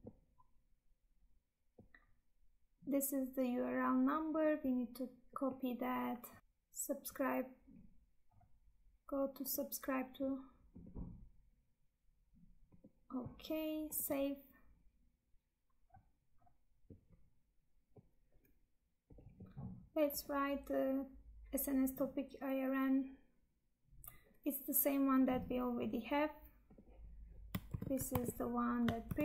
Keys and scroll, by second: 27.7 ctrl+c, 28.3 Tab, 29.0 ctrl+v.